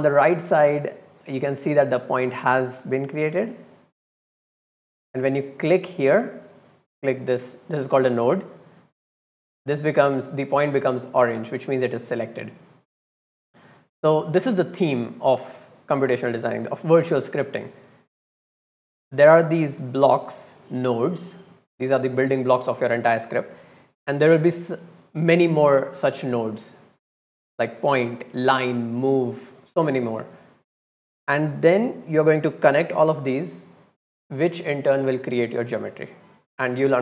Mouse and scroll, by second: 1.5-1.8 drag, 4.1-4.5 drag, 5.0 click, 5.6 click, 6.9 click, 7.3 click, 7.7 click, 12.9 click, 13.7-14.2 drag, 16.3 drag, 17.5-17.9 drag, 18.1-19.2 drag, 19.4 middle click, 19.8 middle click, 20.3-21.1 drag, 21.8 drag, 36.1-36.5 drag.